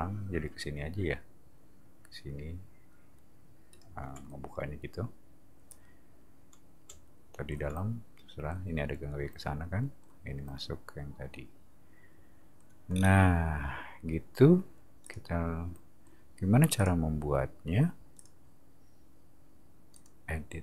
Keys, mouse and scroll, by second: 3.7 shift+click, 12.9-15.0 scroll up 1, 15.0 click, 16.7 click, 18.2 click, 19.9 click.